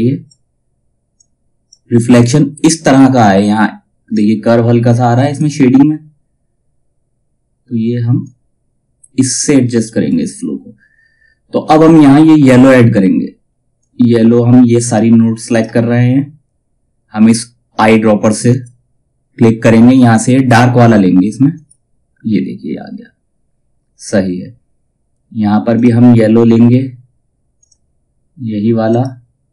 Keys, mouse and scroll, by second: 7.7-13.3 drag, 13.3-18.0 drag, 13.6 typing, 17.2 typing, 18.0 click, 21.1 click, 25.3 click.